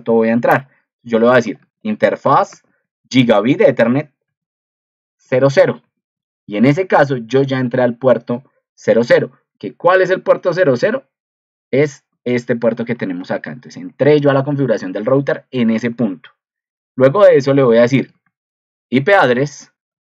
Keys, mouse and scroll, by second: 10.2 ctrl+2.